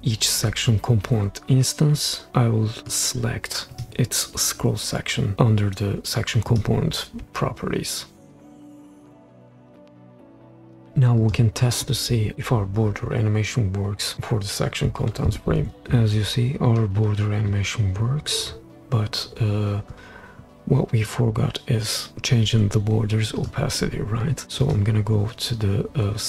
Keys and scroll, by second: 15.3 super+p, 23.8 Escape.